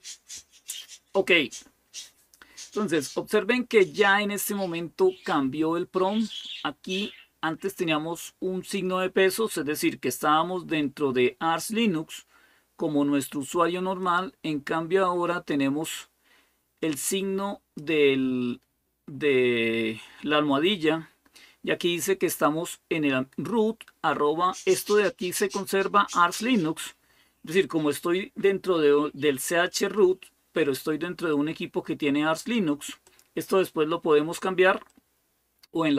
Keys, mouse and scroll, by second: 7.6-14.0 drag, 15.6-17.6 drag, 24.6-26.7 drag, 27.3-32.4 drag, 32.8 click, 34.7-35.9 drag.